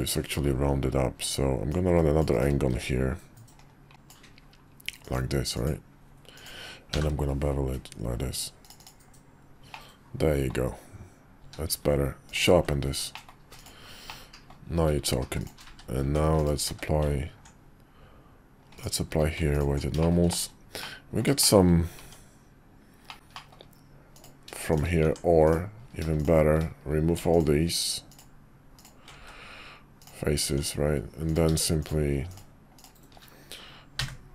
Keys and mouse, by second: 1.7-2.5 drag, 2.7 d, 3.9 click, 9.7-10.5 middle drag, 11.4 q, 13.1 middle click, 13.5 click, 14.1-14.5 middle drag, 15.4 click, 16.7 q, 18.8 click, 19.1 q, 20.0 shift+middle drag, 20.8-21.2 middle drag, 21.4 shift+middle click, 22.0 Tab, 23.1 middle click, 23.1 x, 23.3 middle click, 24.1 click, 24.7 shift+click, 26.2 click, 27.3 ctrl+click, 28.8 ctrl+click, 29.2 x, 30.5 Tab, 32.8 shift+click, 34.0 f.